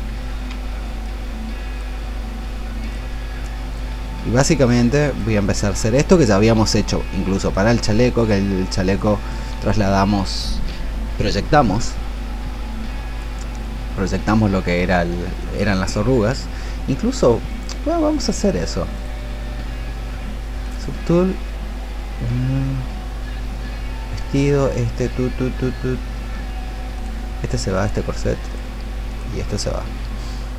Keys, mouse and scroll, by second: 2.8 alt+click, 3.5 click, 4.6 shift+click, 5.6 click, 6.9 shift+click, 7.5 shift+click, 8.1 shift+click, 8.8 shift+click.